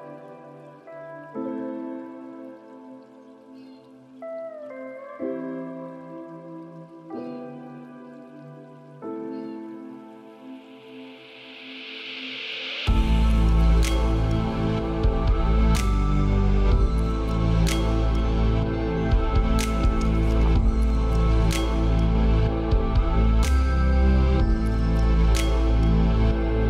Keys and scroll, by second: 4.9 ctrl+space, 15.2 ctrl+space, 22.7 ctrl+space.